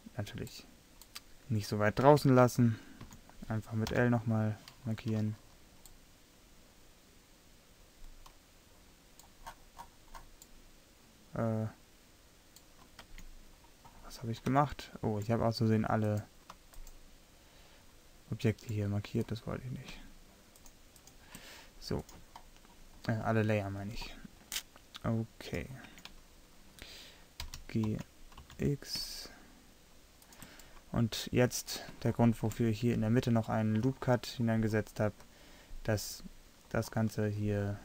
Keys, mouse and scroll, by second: 2.2 Tab, 3.1 a, 4.0 `, 4.0 l, 7.8-9.2 middle drag, 12.4 middle click, 13.2 Tab, 19.0 middle click, 21.1-22.1 middle drag, 26.0 Tab, 27.5 g, 31.7-37.8 middle drag.